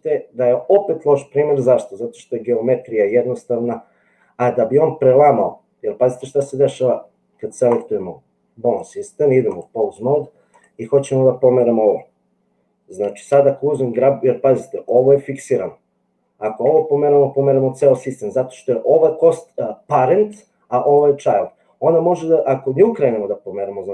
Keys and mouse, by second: 8.8 click, 16.6 g.